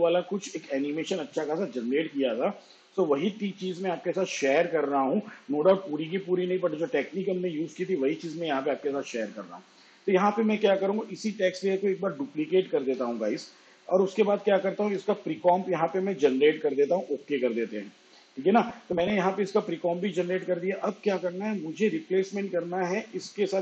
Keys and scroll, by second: 11.1 ctrl+d.